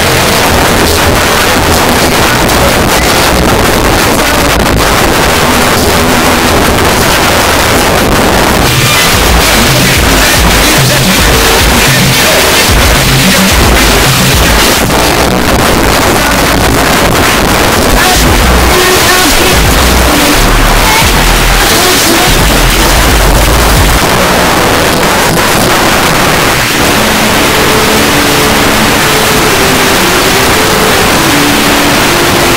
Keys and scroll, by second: 1.4 u, 1.5-2.1 Down, 2.3 Down, 2.5 Down, 2.5 Return, 14.7 Page_Down, 24.0 Page_Down.